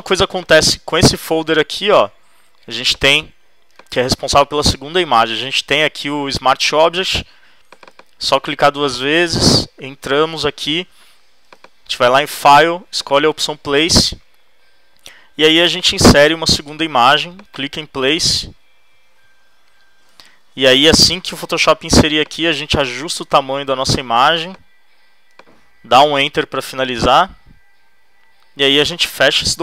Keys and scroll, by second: 26.0 shift+Return.